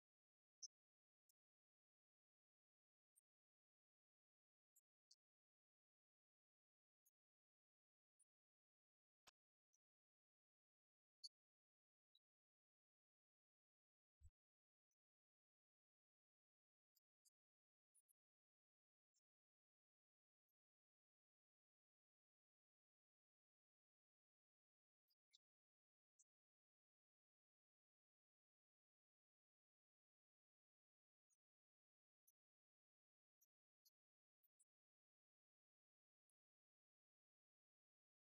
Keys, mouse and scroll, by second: 0.0-1.2 middle drag, 28.1 click, 31.0-33.3 drag.